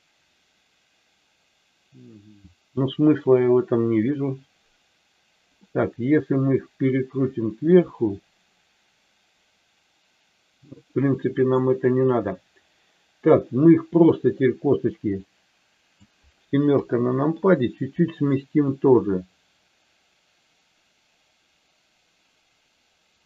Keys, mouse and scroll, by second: 5.6-11.6 middle drag, 14.2-15.8 drag, 16.7 KP_7, 18.7-23.2 drag.